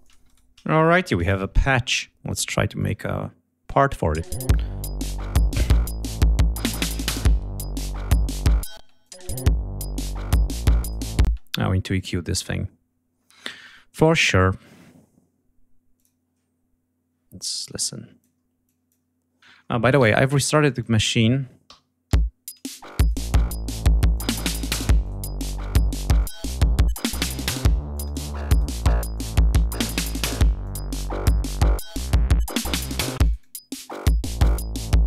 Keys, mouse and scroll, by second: 0.0 shift+click, 0.3 shift+right click, 1.2 click, 2.8 click, 4.2 space, 4.5 ctrl+scroll up 2, 5.2 ctrl+scroll down 2, 5.8 ctrl+click, 6.6 d, 8.8 space, 9.0 click, 9.4 ctrl+scroll up 2, 10.8 click, 11.3 space, 12.0 right click, 13.2-13.6 scroll down 1, 16.0 click, 17.6 click, 18.7 click, 19.6 ctrl+scroll down 2, 19.9 ctrl+scroll up 2, 20.0 ctrl+g, 20.8 click, 22.1 l, 22.9 click, 24.1 click, 25.0 click, 26.2 click, 27.9 click, 28.8 scroll down 1, 29.1-30.4 drag, 30.4 scroll down 2, 30.6 scroll up 2, 30.6-32.2 drag, 33.1-35.0 drag.